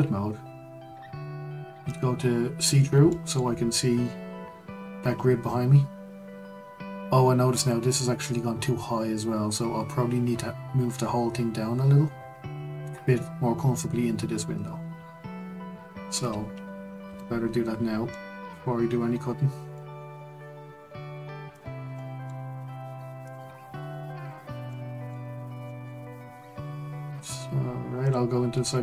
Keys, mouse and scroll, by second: 1.9 click, 2.7-3.1 scroll up 1, 3.1-6.1 shift+middle drag, 17.0 Tab, 17.7-18.1 scroll down 2, 18.1-21.1 middle drag, 21.5 click, 21.9-23.3 middle drag, 23.3 click, 24.2 click, 24.7-28.0 middle drag, 28.0 click, 28.5-28.8 scroll up 1.